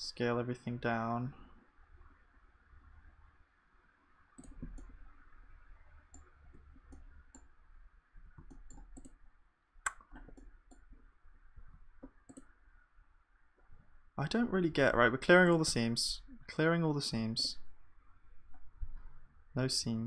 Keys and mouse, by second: 5.0 middle click, 6.5 Tab, 8.1 Tab, 11.5 ctrl+e, 13.7 a, 14.7 ctrl+e, 15.7 a, 17.1 u.